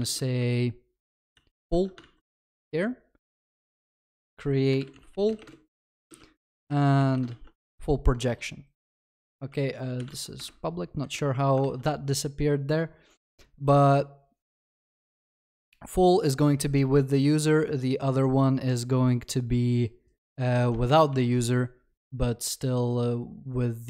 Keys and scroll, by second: 1.4 ctrl+s, 1.7 ctrl+alt+shift+l, 2.0 ctrl+s, 7.3 ctrl+d, 7.3 ctrl+s, 11.6 Escape, 15.1 ctrl+s, 21.2 ctrl+s.